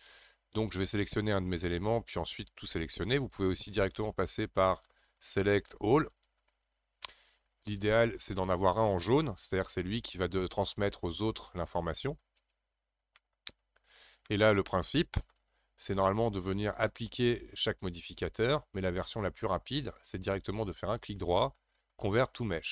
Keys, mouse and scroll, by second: 0.6 click, 1.6 click, 3.2 click, 5.2-8.2 drag, 13.1-16.7 middle drag, 16.7-19.8 drag, 21.0-22.7 right drag.